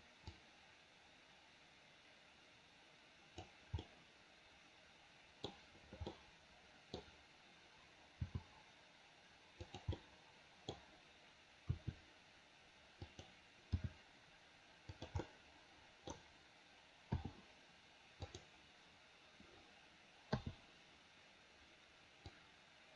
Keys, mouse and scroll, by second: 0.5-3.6 drag, 3.9-5.5 middle drag, 6.1 middle click, 8.2 g, 10.0 middle click, 10.7-11.2 scroll down 1, 11.7 r, 13.7 g, 15.2 middle click, 17.2 i, 18.3 click, 20.5 i, 22.4-22.9 drag.